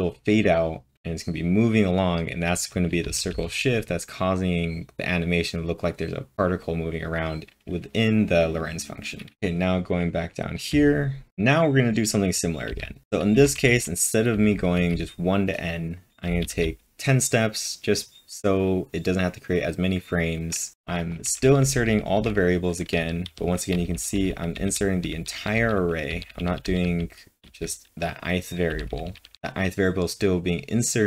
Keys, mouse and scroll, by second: 3.0 typing, 9.1-11.2 typing, 12.4-14.7 typing, 20.7-26.6 typing, 28.0-29.5 typing.